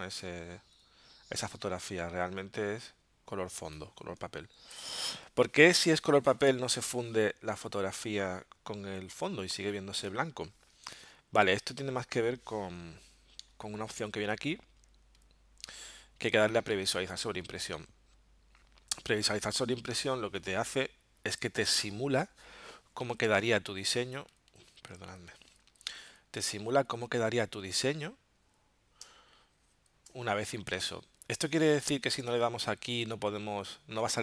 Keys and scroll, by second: 4.8 BackSpace, 13.4 alt+super+0, 22.9 z, 23.4 space, 29.0 space.